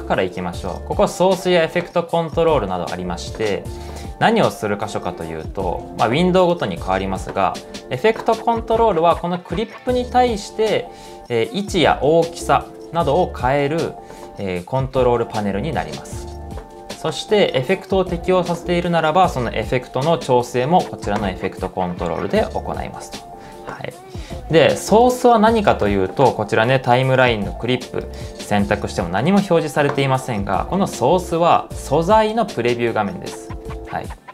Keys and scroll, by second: 19.3-21.0 typing, 24.1 typing, 32.0 Return.